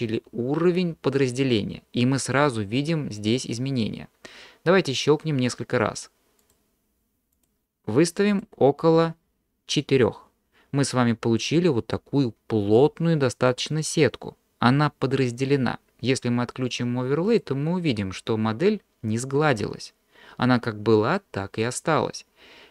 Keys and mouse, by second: 6.4 click, 8.4 click, 17.3 click.